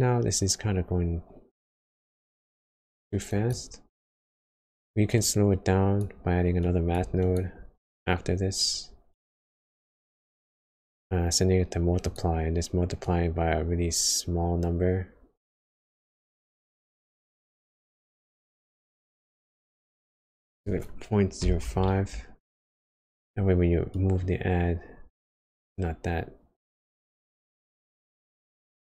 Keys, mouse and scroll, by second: 4.4 click, 6.5 click, 8.0 shift+d, 9.2 click, 10.8 click, 18.3 click, 23.8 click.